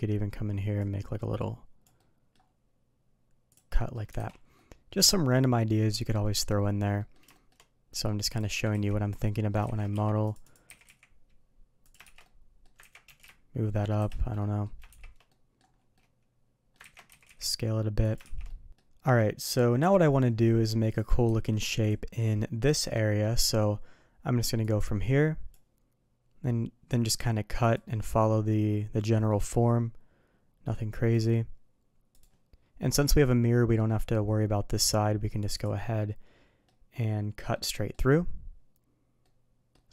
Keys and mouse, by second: 0.8-3.6 drag, 2.0-3.6 middle drag, 3.7 middle click, 4.1 alt+a, 4.5-6.5 middle drag, 6.9 middle drag, 7.3 shift+middle drag, 7.9 middle click, 8.7 ctrl+z, 9.6 ctrl+shift+z, 9.9 q, 10.6 s, 12.0 shift+2, 12.2-12.6 ctrl+shift+middle drag, 12.8 ctrl+z, 13.0 g, 14.4 middle drag, 14.9 shift+2, 15.2-15.6 middle drag, 15.9-16.7 middle drag, 16.8 ctrl+z, 17.0 s, 18.2 shift+2, 18.4 middle drag, 20.8 click, 21.2 d, 22.7-23.2 shift+middle drag, 24.7-25.5 drag, 35.8-39.9 middle drag.